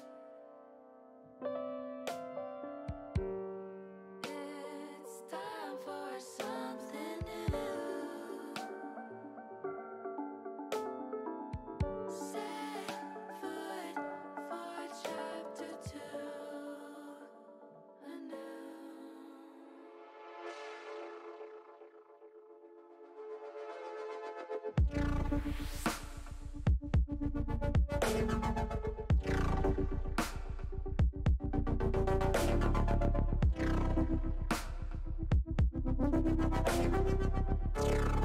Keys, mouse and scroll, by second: 0.7 shift+click, 1.5 ctrl+z, 1.7 middle click, 3.8 shift+click, 4.5 shift+click, 6.1 z, 7.3 ctrl+z, 8.9 shift+click, 9.8 shift+click, 10.2 shift+middle click, 13.1 shift+click, 13.9 ctrl+z, 14.4 middle click, 14.6 middle click, 15.2 middle click, 16.4 shift+click, 17.6 middle click, 18.3 shift+middle click, 19.3 shift+click, 19.7 shift+click, 20.9 middle click, 21.9 shift+click, 22.7 shift+click, 23.9 middle click, 24.7 shift+click, 25.3 shift+click, 25.8 shift+click, 26.2 middle click, 26.8 middle click, 27.6 shift+click, 28.7 h, 30.2 middle click, 31.1 middle click, 32.3-33.5 middle drag, 36.3 click, 37.8 shift+click.